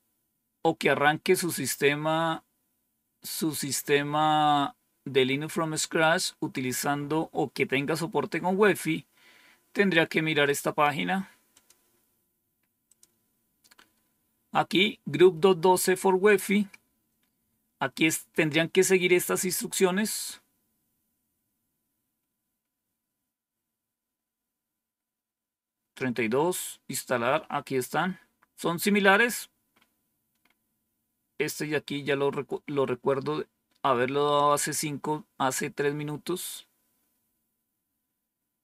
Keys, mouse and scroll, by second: 10.3 right click, 11.4 click, 12.8 click, 20.4-21.3 scroll down 2, 21.3-22.5 scroll down 1, 25.7-26.5 scroll down 2, 26.8-27.5 scroll down 2, 27.6-28.6 scroll down 2, 28.6 scroll down 1, 29.0-30.3 scroll up 2, 30.3-30.8 scroll up 1, 30.8-32.1 scroll down 4, 36.4 scroll down 1, 37.1-38.6 scroll down 1.